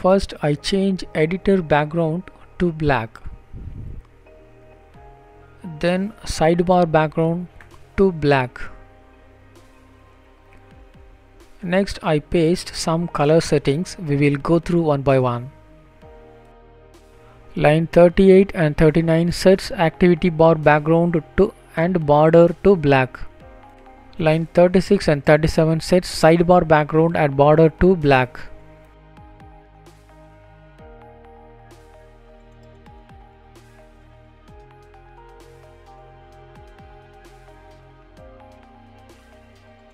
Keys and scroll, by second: 11.1 ctrl+v, 11.9 ctrl+s.